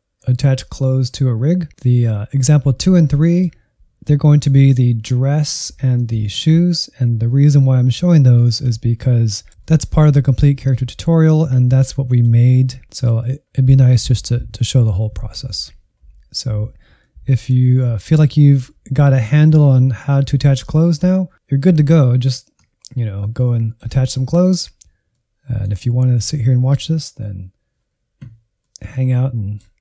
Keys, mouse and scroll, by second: 1.7-5.9 middle drag, 5.9-9.3 drag, 9.3 shift+middle click, 10.0 scroll up 1, 10.2-12.1 middle drag, 12.1 click, 16.3-17.9 middle drag, 17.9-18.7 scroll up 1, 18.7-21.3 middle drag, 23.1-29.8 middle drag.